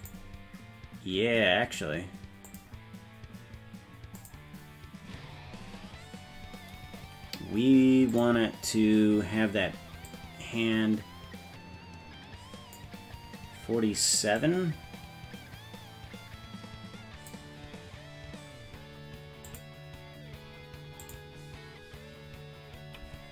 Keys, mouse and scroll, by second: 0.0 click, 2.5 click, 4.2 click, 8.1 click, 10.1-12.8 drag, 14.4-17.3 drag, 19.5 click, 21.0 click.